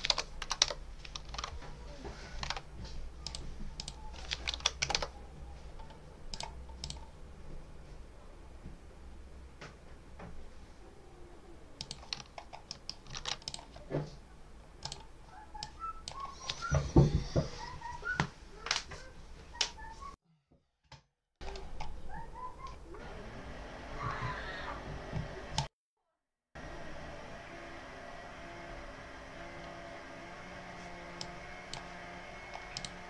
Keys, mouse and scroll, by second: 0.0 BackSpace, 0.3 5, 0.5 Return, 1.2 alt+Tab, 2.4 alt+Tab, 3.1 click, 3.6 click, 4.4 BackSpace, 4.7 7, 4.8 Return, 6.2 click, 6.7 click, 11.6 click, 12.6 middle click, 13.3 ctrl+s, 13.3 ctrl+click, 14.7 click, 15.5 click, 25.4 click, 31.0 click, 32.6 click.